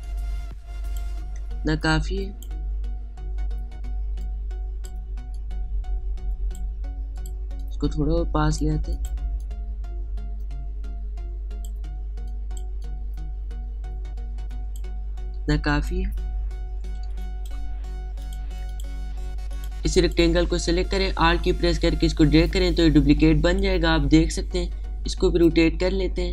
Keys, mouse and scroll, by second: 12.6 space, 12.9 click, 13.1 space, 13.4-16.0 drag, 16.0 space, 16.1 click, 16.5 space, 17.1-17.6 alt+scroll down 1, 17.7 space, 17.7 click, 18.2 space, 18.9 click, 22.1-26.2 alt+drag, 26.2-26.3 shift+drag.